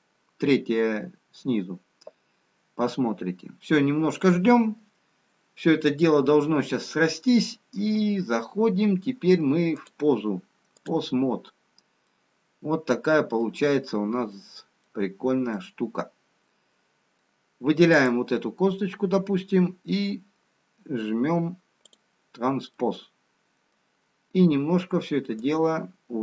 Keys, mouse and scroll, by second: 13.0 middle click, 13.0-14.5 scroll down 1, 14.5 middle click, 14.5-15.5 scroll up 2, 15.9 middle click, 15.9-17.2 scroll down 2, 18.5 click, 22.3 click, 23.1 middle click.